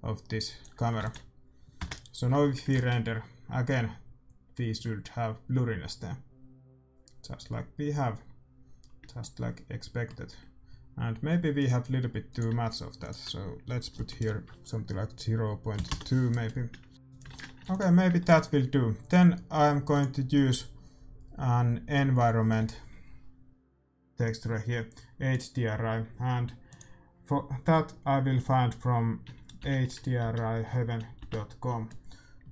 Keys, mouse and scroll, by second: 1.0 ctrl+s, 1.8 KP_0, 2.4-4.3 middle drag, 4.3 shift+z, 4.9-6.7 middle drag, 8.6-9.8 middle drag, 11.9-14.1 drag, 16.2 Return, 16.2 KP_2, 16.9 ctrl+s, 17.1-18.2 drag, 17.4 shift+z, 17.6 ctrl+s, 18.2-20.1 middle drag, 20.1-22.1 drag.